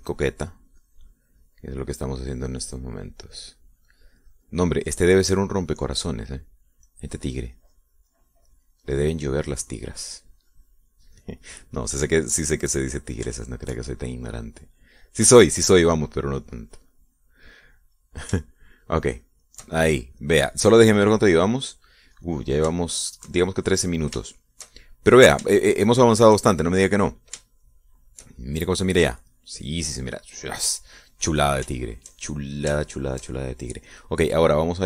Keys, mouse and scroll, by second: 6.4 middle click, 7.6 middle click, 8.8-12.7 drag, 12.8 middle click, 12.9-14.4 drag, 14.8 shift+middle click, 15.3 shift+middle click, 15.9-16.3 scroll up 1, 16.3 click, 16.9 middle click, 17.3 scroll up 1, 17.5-18.9 drag, 18.9 middle click, 19.7 shift+scroll up 1, 19.8-21.9 shift+middle drag, 22.8 click, 23.5 click, 24.2 shift+middle click, 25.7 shift+middle click, 26.6 shift+click, 26.7 shift+middle click, 26.7 shift+click, 27.3 shift+middle click, 28.8 shift+click, 29.7 shift+middle click, 29.8 shift+click, 29.8-32.3 shift+middle drag, 33.1 shift+click, 34.2-34.8 shift+drag.